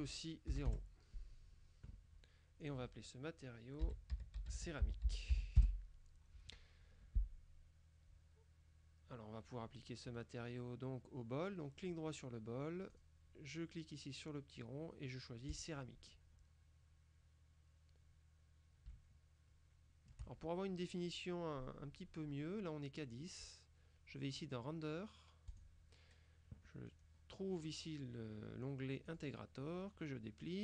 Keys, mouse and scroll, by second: 0.6 KP_0, 0.8 KP_Enter, 2.7 click, 3.9-5.4 typing, 5.7 Return, 10.1 click, 11.9 right click, 13.0 click, 15.6 click, 19.0-20.7 shift+middle drag, 25.6 click, 26.9-27.7 scroll down 3, 29.1 click, 29.8-30.5 scroll down 2.